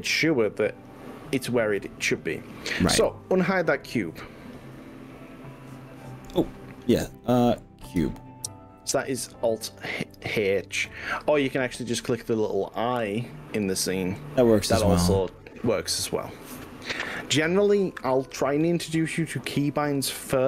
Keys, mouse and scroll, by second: 2.9-4.3 middle drag, 4.3-5.7 drag, 7.9 click, 9.1 alt+h, 10.9 click, 17.0 middle click, 17.1-20.4 middle drag.